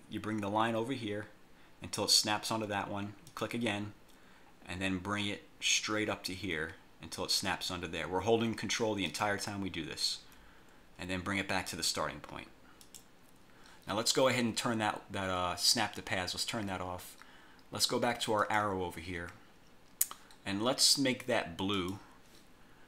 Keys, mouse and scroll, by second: 3.4 ctrl+click, 9.2 ctrl+click, 13.0 click, 16.4 click, 18.5 click, 21.9 click.